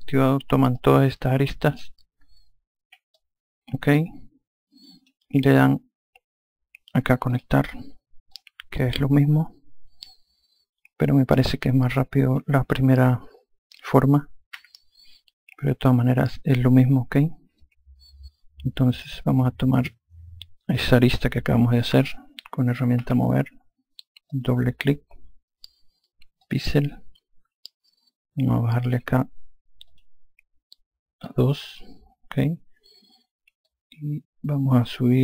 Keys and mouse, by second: 0.7 click, 3.1 click, 7.3 click, 8.3 click, 17.5 click, 21.9 2, 24.3 click, 26.4 click, 29.8 click, 33.6 click.